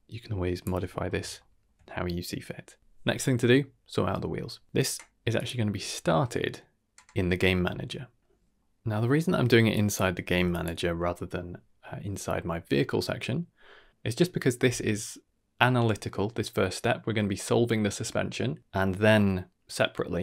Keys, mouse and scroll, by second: 0.9-1.6 scroll down 3, 1.4 shift+middle drag, 1.8-5.3 middle drag, 5.3 click, 8.2 middle click, 8.8 middle click, 9.4 middle click, 9.7 drag, 10.2 g.